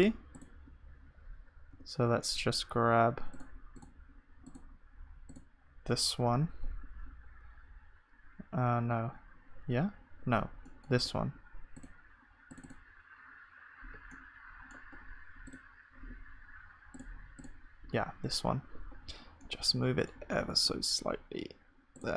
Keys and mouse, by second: 16.0-22.1 drag.